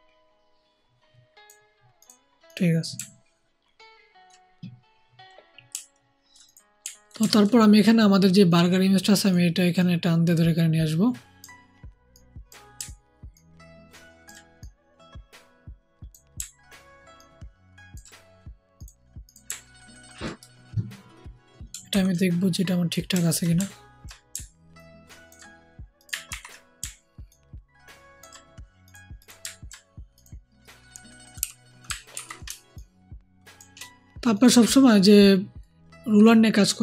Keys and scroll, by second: 21.8 ctrl+t, 26.2 ctrl+t, 26.7 ctrl+alt+t, 31.3 Right, 32.0 ctrl+t.